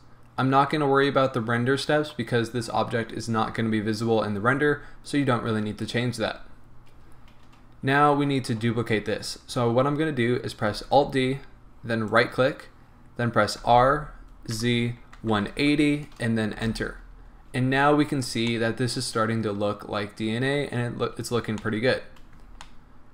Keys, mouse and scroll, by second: 10.9 alt+d, 12.2 right click, 13.8 r, 16.6 Return, 17.6 a, 18.3 scroll down 1, 18.6-20.7 middle drag, 20.7-21.1 scroll up 1, 21.7-23.1 middle drag, 22.0-22.7 scroll up 2.